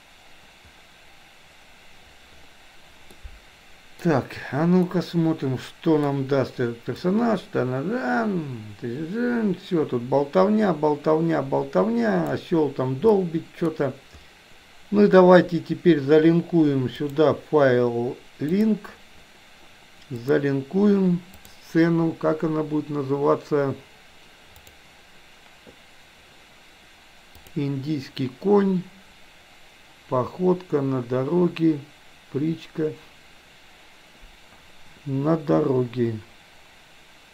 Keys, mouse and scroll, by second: 3.1-4.1 middle drag, 4.9-6.1 middle drag, 7.1-12.5 drag, 13.1-13.6 middle drag, 17.0-18.9 drag.